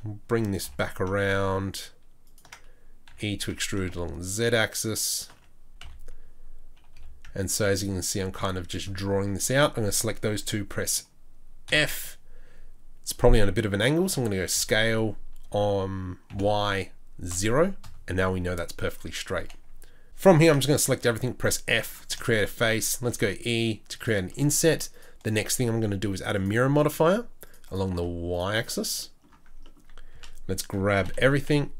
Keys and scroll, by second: 0.6 e, 3.1 e, 11.7 f, 14.0 s, 20.4 a, 21.0 f, 23.0 e, 30.1 a, 31.0 g.